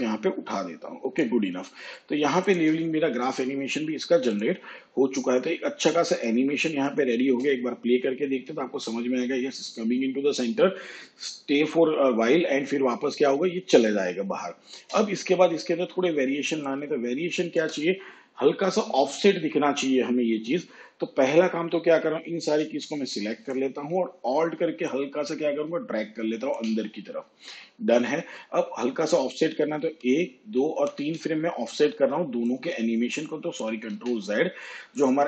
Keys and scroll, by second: 7.2 space, 14.7 space, 29.8 ctrl+Right, 33.9 ctrl+z.